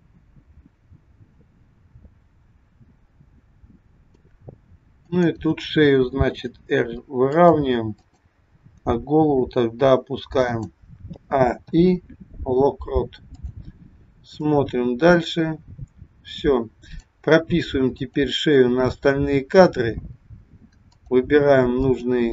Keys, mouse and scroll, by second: 5.1 click, 6.4 r, 8.0 click, 9.1 r, 11.2 a, 11.7 i, 14.5 click, 17.8 click, 21.0 click, 21.8 click.